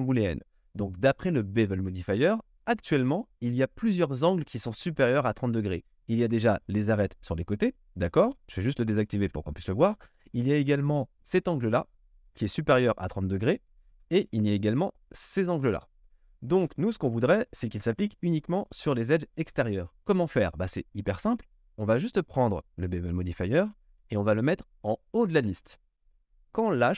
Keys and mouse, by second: 9.4-20.0 middle drag, 20.0 click, 20.2-22.6 middle drag, 22.6-26.5 drag, 26.5-26.9 middle drag.